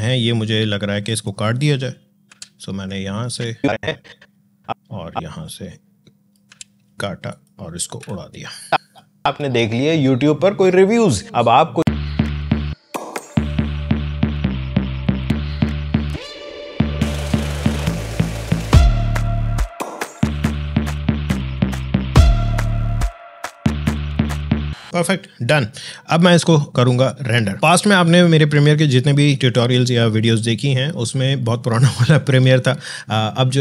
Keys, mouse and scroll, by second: 2.1 e, 3.2-6.3 drag, 6.3 e, 7.1 click, 7.8 r, 8.6 click, 9.2 space, 11.8-12.4 scroll down 2, 12.0 click, 12.5 click, 13.3-13.9 alt+scroll up 2, 13.4 click, 13.5 space, 14.1 scroll down 1, 14.5 click, 14.6-17.1 typing, 15.0 alt+scroll up 2, 15.1 click, 15.3 click, 15.4 alt+scroll down 1, 15.7 click, 16.9 click, 17.1 click, 17.2-17.7 alt+scroll down 2, 17.3 alt+space, 17.9 alt+click, 18.0 alt+e, 18.2 alt+space, 18.3 alt+scroll down 1, 18.5 alt+scroll up 1, 18.7-19.1 scroll down 2, 19.9-21.1 typing, 20.0 click, 20.4 click, 21.2 Delete, 21.3 scroll up 1, 21.6 alt+scroll down 1, 21.7 click, 22.3 space.